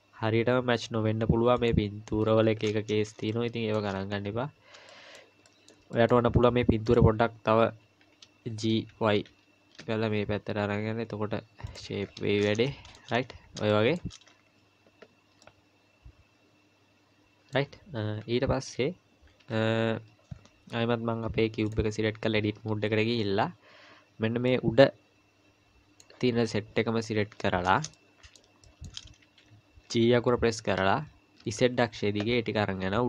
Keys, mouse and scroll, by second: 3.3 shift+middle click, 4.0-4.7 scroll up 1, 4.7 scroll up 2, 4.9 shift+middle click, 6.9 click, 8.5 g, 12.0-12.6 scroll down 2, 12.6 scroll down 4, 12.7 shift+middle click, 13.2-13.6 scroll up 2, 13.7 shift+middle click, 14.3-15.2 scroll down 3, 15.4 middle click, 18.2 KP_1, 19.4 KP_3, 20.3-21.2 scroll up 2, 21.2 scroll up 1, 21.7 click, 22.4 Tab, 24.5 click, 27.2-27.5 scroll down 4, 27.9 shift+middle click, 28.6 shift+middle click, 29.9 g.